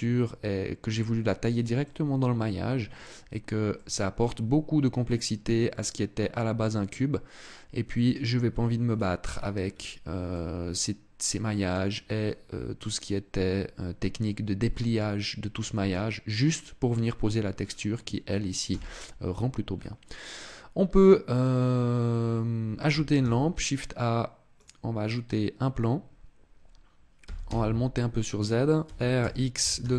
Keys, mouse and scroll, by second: 1.5 middle click, 3.5 middle click, 5.5 middle click, 8.2-9.4 scroll down 11, 9.4-10.0 scroll up 4, 10.0 middle click, 12.1 scroll up 1, 12.7 scroll up 1, 13.9 middle click, 17.3 scroll down 3, 18.4 KP_0, 19.9 scroll up 1, 22.9 shift+a, 26.9 g, 28.6 click, 28.6 r.